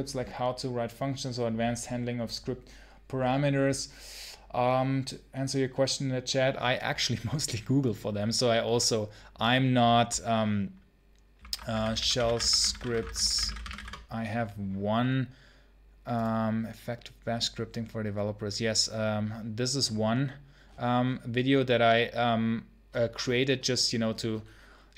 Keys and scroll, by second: 11.2 ctrl+t, 11.3-14.1 typing.